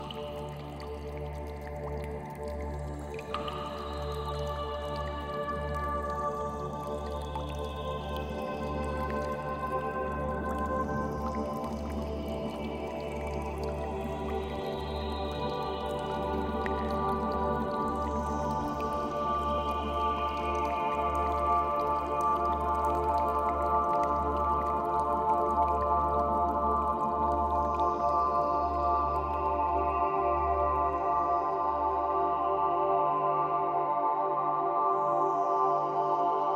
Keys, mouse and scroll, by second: 0.3 scroll down 4, 0.6 Tab, 0.8 middle click, 3.6 Tab, 3.8 shift+middle click, 4.2-4.7 scroll up 5, 4.4 shift+middle click, 5.1 click, 5.3 shift+click, 5.6 w, 6.0 click, 6.2 shift+middle click, 6.6 click, 6.7 click, 6.8 shift+click, 7.1 shift+click, 7.5 w, 7.8 click, 8.2 middle click, 8.7 shift+middle click, 8.9 middle click, 9.7 shift+click, 10.1 w, 10.5 click, 10.7 shift+middle click, 11.5 click, 11.7 shift+click, 11.8 shift+click, 12.0 click, 12.1 w, 13.6 scroll down 3, 13.8 middle click, 16.2 Tab, 16.4-16.8 scroll down 4, 16.8 middle click, 19.8 Tab, 19.9-20.3 scroll down 6, 20.5 shift+middle click, 20.7 middle click, 22.3 KP_0, 23.1 n, 24.1 click, 25.4 click, 25.9 shift+middle click, 26.6 middle click, 27.4 scroll down 2, 27.8 shift+middle click, 28.1 middle click, 29.2 scroll down 1, 29.7 middle click, 30.4 shift+middle click, 31.9 Tab, 33.6 click.